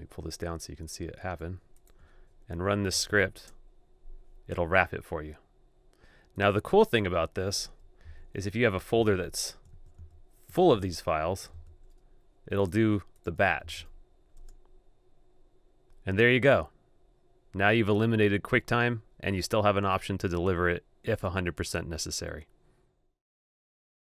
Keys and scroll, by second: 2.7 super+v, 7.8 super+BackSpace, 8.9 super+d, 9.6 super+a, 9.8 super+d, 13.5 super+v.